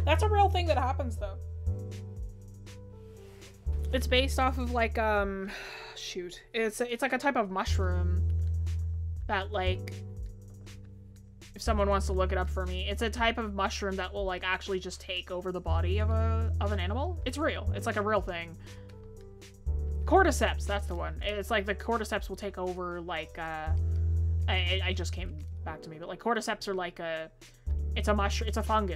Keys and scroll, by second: 23.3-24.5 scroll up 1.